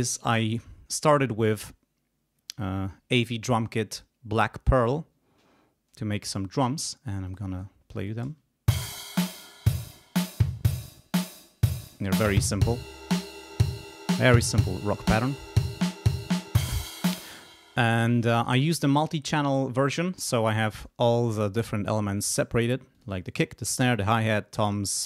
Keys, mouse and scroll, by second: 0.4 click, 6.6 click, 7.2 click, 8.2 space, 17.1 space, 20.7 click, 22.1 click, 22.9 click, 23.6 click, 23.9 click, 24.5 click.